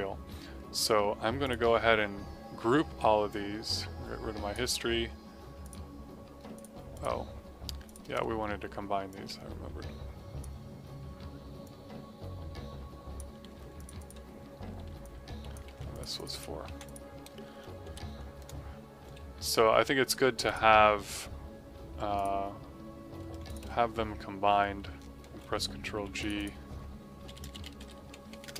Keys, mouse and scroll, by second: 1.4 click, 8.3 space, 9.0 space, 11.6 click, 14.3 F2, 14.9 click, 15.7 c, 15.8 click, 16.6 v, 16.8 click, 17.5 BackSpace, 17.8 KP_4, 18.3 KP_Enter, 20.4 click, 20.9 middle click, 22.1 click, 23.4 click, 25.2 g, 26.1 click, 27.0-28.5 typing.